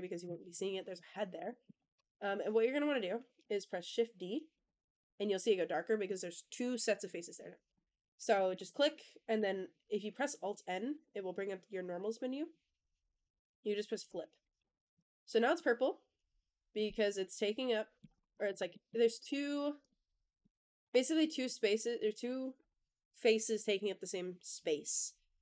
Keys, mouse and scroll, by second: 0.1 KP_1, 1.4 shift+middle click, 1.8 scroll up 2, 4.4 shift+d, 7.6 click, 8.2 shift+middle click, 8.5-9.2 scroll down 1, 10.8 alt+n, 14.5 Tab, 14.8 click, 15.2 scroll down 1, 15.4-16.6 middle drag, 16.8-17.9 middle drag, 18.0 click, 18.2 click, 18.3 Tab, 18.6 middle click, 19.1 Tab, 19.7 click, 20.3 click, 20.7 h, 21.0 click, 21.3-21.7 middle drag, 21.9 middle click.